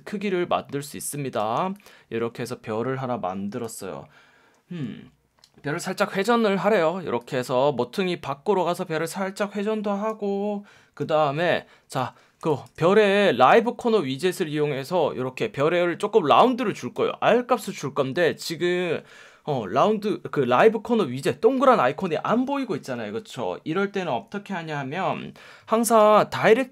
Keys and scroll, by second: 12.4 space, 26.0 F1.